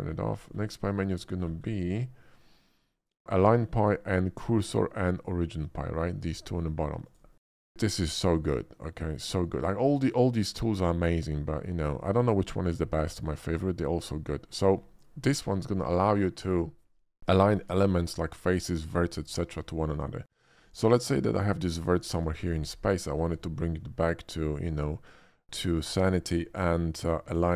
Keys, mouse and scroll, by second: 0.1-0.5 scroll down 5, 0.5 middle drag, 1.4 middle click, 1.4 scroll down 2, 1.6 middle click, 3.4 click, 5.7 click, 7.0 click, 7.7 shift+a, 11.9 click, 12.4 middle drag, 13.1 shift+middle click, 13.4 shift+middle click, 15.2 Tab, 17.2 middle click, 17.9 shift+middle click, 18.2 shift+middle click, 19.7 shift+middle click, 20.2 shift+click, 20.6 shift+click, 21.3 shift+click, 21.7 shift+middle click, 22.1 g, 22.4 click, 23.1 shift+middle click, 23.4 shift+middle click, 24.5 shift+scroll up 1, 24.8 shift+middle click, 26.0 middle click, 26.1 shift+middle click, 26.6 shift+middle click.